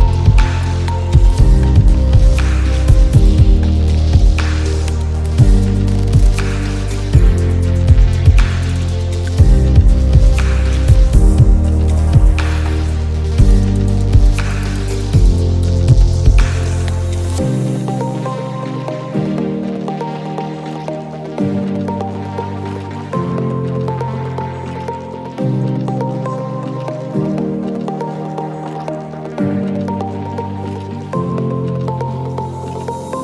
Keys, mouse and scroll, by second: 1.1-1.6 alt+scroll up 2, 1.6-2.8 alt+shift+drag, 2.8-3.6 alt+scroll up 2, 3.6 click, 6.7 click, 7.5 click, 9.7 click, 11.3 ctrl+z, 11.6-17.2 drag, 17.2 alt+scroll up 1, 17.5 ctrl+z, 18.0-22.3 drag, 22.3 space, 22.4 click, 22.4 space, 23.2 click, 24.0 right click, 24.6-27.2 drag, 27.6 click, 28.9-29.8 drag, 29.9-31.0 drag, 31.0 click, 32.7 click.